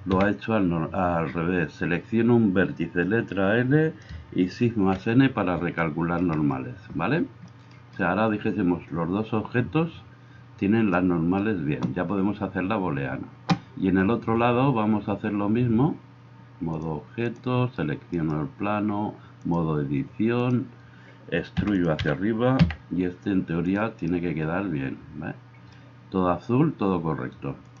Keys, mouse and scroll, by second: 0.1 l, 4.8 shift+n, 18.1 middle click, 18.1 right click, 21.6 e, 22.0-27.8 middle drag, 22.0 g.